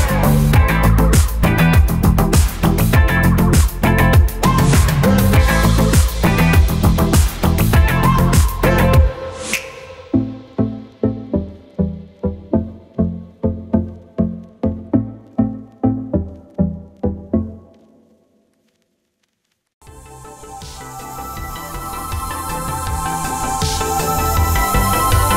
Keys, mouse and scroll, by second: 0.5 click, 6.8 click, 9.8 click, 14.6 Escape, 15.8 click.